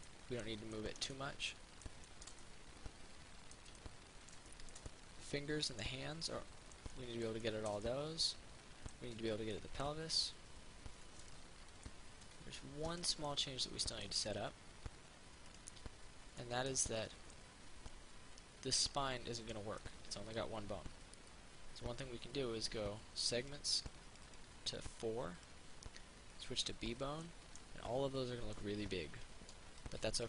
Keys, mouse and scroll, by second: 13.1 right click, 13.5 middle click, 15.7 right click, 16.6-20.0 middle drag, 23.7-27.5 drag, 27.5 middle click, 28.1-29.1 scroll down 1, 29.9 Tab.